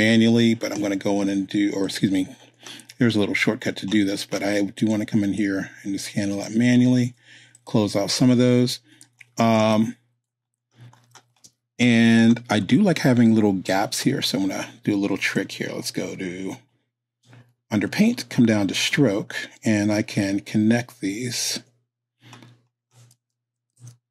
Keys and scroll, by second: 9.6 space, 23.7 super+z.